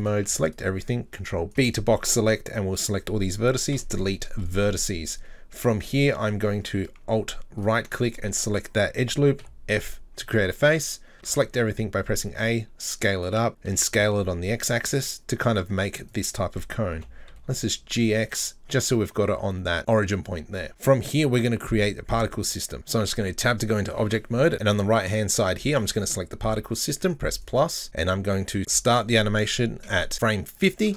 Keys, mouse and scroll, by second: 0.0 right click, 0.3 b, 1.5 right click, 3.7 Delete, 5.7-7.6 middle drag, 7.6-9.4 alt+right drag, 9.4 f, 10.0-11.1 middle drag, 11.1 s, 11.2 a, 12.4 s, 13.6 s, 16.9 g, 23.0 Tab, 25.9-28.6 drag, 28.8-30.1 drag.